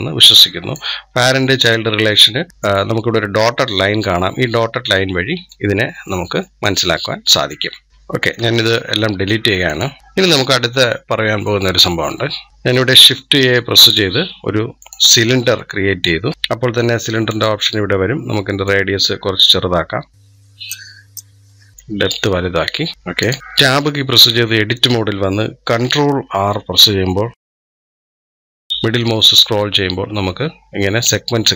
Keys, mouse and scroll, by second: 0.9-1.4 scroll up 3, 1.4-4.0 middle drag, 4.8-5.5 middle drag, 5.5-5.9 scroll down 3, 5.9-6.5 middle drag, 6.5-8.5 drag, 8.5 Delete, 9.5 click, 9.8 Delete, 10.0-12.5 middle drag, 12.5 shift+a, 15.4-17.1 middle drag, 17.1-20.8 drag, 21.1-22.9 drag, 23.0-23.3 drag, 23.6 Tab, 26.4 ctrl+r.